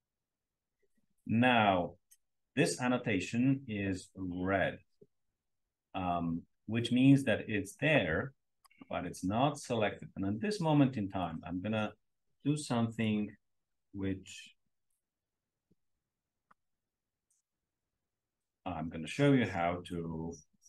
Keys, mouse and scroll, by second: 12.9 click, 17.3 click.